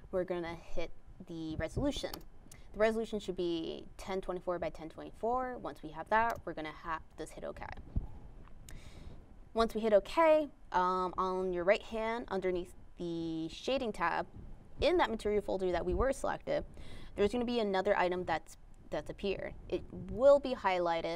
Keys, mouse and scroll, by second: 2.1 click, 3.3 click, 4.4 click.